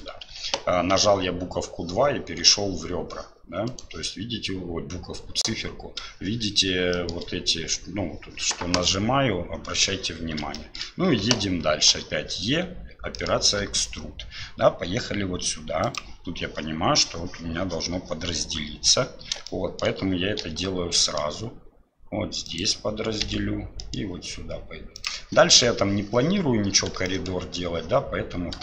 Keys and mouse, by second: 0.3 2, 3.7 click, 6.9 shift+click, 10.5 shift+middle click, 19.5 shift+middle click, 27.1 shift+middle click.